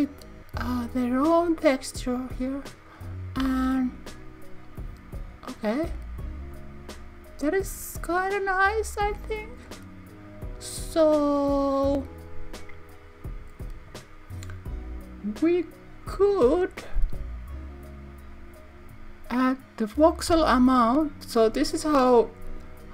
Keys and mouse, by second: 20.1-22.9 drag.